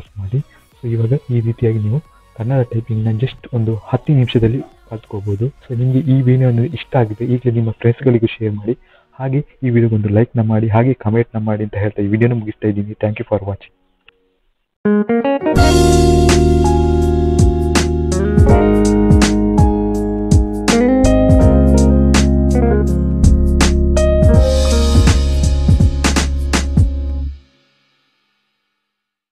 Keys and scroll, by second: 0.2 e.